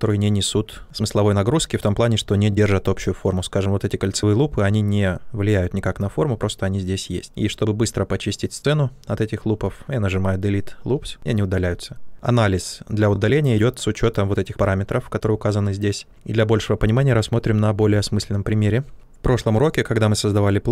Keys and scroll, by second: 17.8 q, 18.8 w.